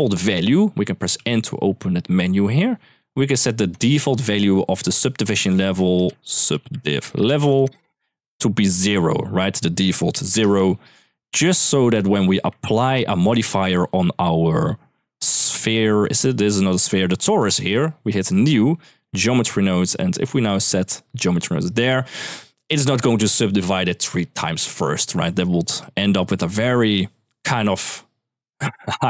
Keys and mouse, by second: 0.9 n, 2.3 click, 3.5 click, 5.0 click, 5.2-7.6 drag, 8.5-10.2 drag, 11.6 ctrl+s, 12.7 click, 17.9-18.9 drag, 19.6-21.4 drag, 25.1 click, 25.7 shift+middle click.